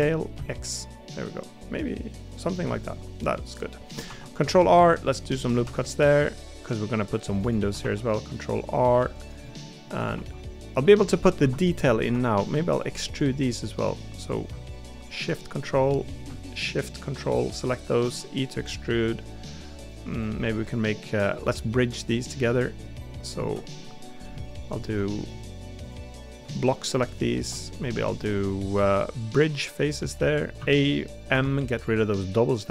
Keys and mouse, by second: 2.7 middle click, 4.0 ctrl+r, 9.4 middle click, 11.8 middle click, 12.1 3, 17.3 middle click, 20.4 middle click, 21.0 middle click, 22.2 middle click, 23.8 middle click, 25.1 middle click, 26.1 middle click, 30.2 middle click, 31.3 m.